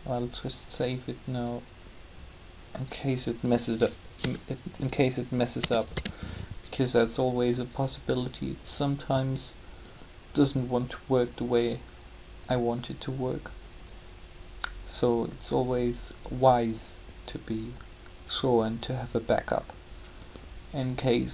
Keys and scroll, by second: 4.1 BackSpace, 4.8 8, 5.6 Return.